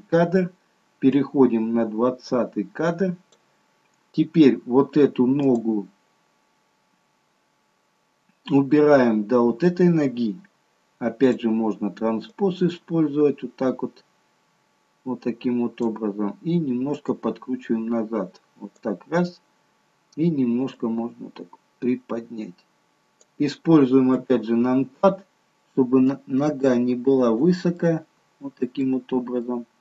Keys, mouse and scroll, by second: 1.6 click, 5.5 click, 11.2 click, 12.8 click, 17.1 click, 20.8 click, 24.2 KP_1, 26.4 click, 27.8 middle click, 29.5 middle click.